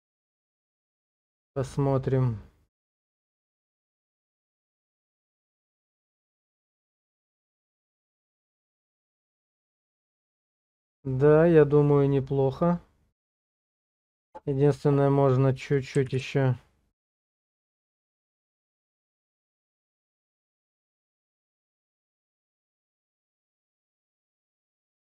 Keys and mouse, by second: 1.8 click, 9.5 shift+click, 16.1 Page_Down, 20.5 shift+click.